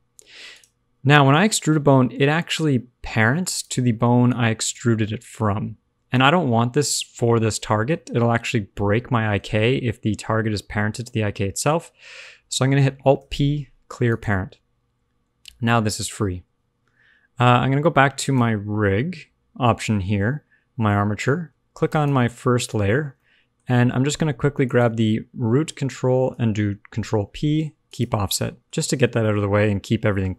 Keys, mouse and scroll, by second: 0.5 click, 4.0 d, 4.2 click, 4.6-5.1 d, 6.1 click, 6.1 d, 6.5 d, 7.8 shift+middle click, 7.9 scroll down 1, 8.1 shift+middle click, 9.1 scroll up 1, 9.5 shift+middle click, 13.1 alt+p, 15.3 g, 18.2 click, 21.8 shift+click, 24.0 middle click, 24.6 shift+click, 27.0 ctrl+p, 28.3 middle click, 29.2 middle click.